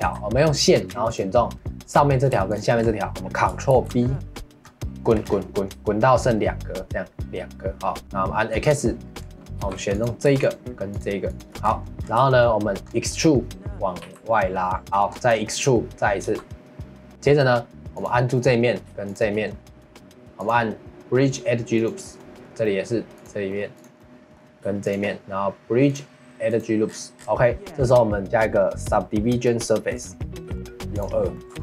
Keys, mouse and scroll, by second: 0.0 2, 1.1-3.7 alt+drag, 3.7 ctrl+b, 8.0 middle click, 8.5 click, 9.1-9.6 scroll up 1, 9.6 3, 9.9-11.4 drag, 11.6-12.2 scroll down 5, 11.8 middle click, 12.2 shift+middle click, 12.9 scroll up 1, 13.1 middle click, 14.0 e, 14.8 shift+middle click, 15.1 scroll up 1, 15.3 middle click, 16.2 e, 17.1 middle click, 17.9 click, 18.3 middle click, 19.0-22.2 shift+drag, 22.2 middle click, 23.1 click, 23.5 middle click, 23.7 click, 24.0 middle click, 24.8-26.8 shift+drag, 26.8-27.4 scroll down 9, 27.4 middle click, 28.2-30.5 drag, 30.5 ctrl+s, 30.9 click, 31.3 middle click, 31.5 ctrl+z.